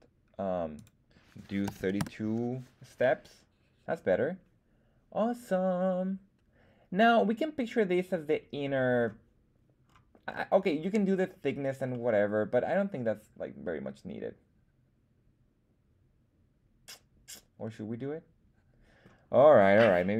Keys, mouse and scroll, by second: 0.7-2.5 drag, 2.9-9.0 middle drag, 9.8-10.8 scroll up 3, 10.8-11.8 scroll up 1, 11.8-19.0 middle drag.